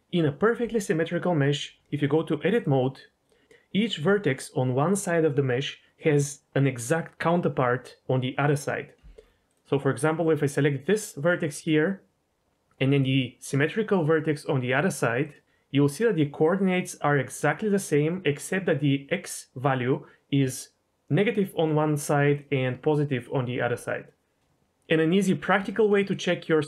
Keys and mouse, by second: 2.5-3.3 drag, 15.2 click, 25.6 shift+middle click.